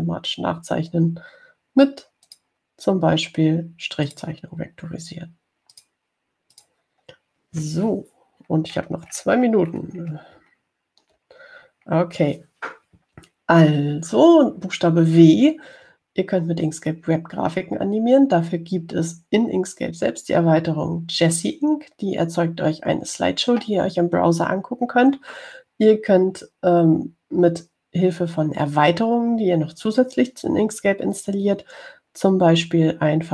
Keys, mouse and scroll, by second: 3.5 click, 5.3 click, 7.0 click, 7.8 click, 9.8-11.0 scroll down 5, 12.1-12.9 ctrl+scroll down 2.